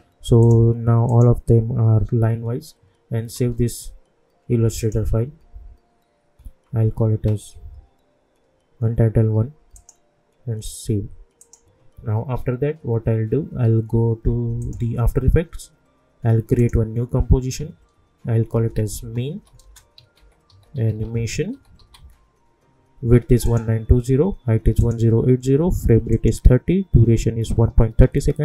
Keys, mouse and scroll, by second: 3.3 ctrl+s, 4.8 click, 9.7 click, 14.6 click, 18.3-22.4 typing, 23.4 click.